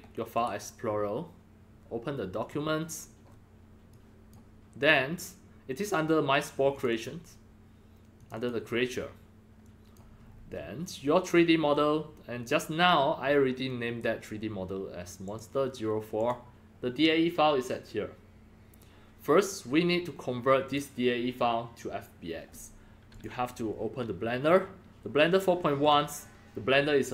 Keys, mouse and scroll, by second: 0.3-2.5 right drag, 2.3-3.9 drag, 4.0 click, 6.7 click, 6.9 click, 8.2 click, 8.4 click, 9.6-9.9 drag, 10.2-11.3 scroll down 5, 13.2-13.9 scroll up 3, 14.0-14.3 scroll down 3, 15.2 click, 16.1 click, 20.6 click, 23.1 click, 25.8 click.